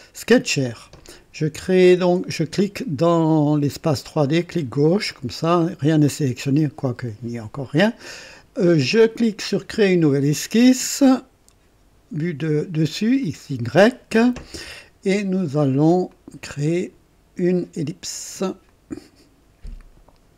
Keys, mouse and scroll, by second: 0.0 click, 4.4 click, 9.7 click, 13.2 click, 16.1 click, 18.7 click.